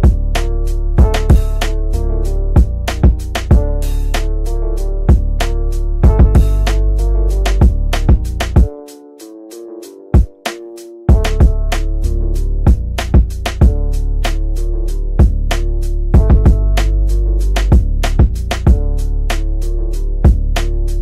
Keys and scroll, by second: 8.0 shift+F2, 8.7 F9.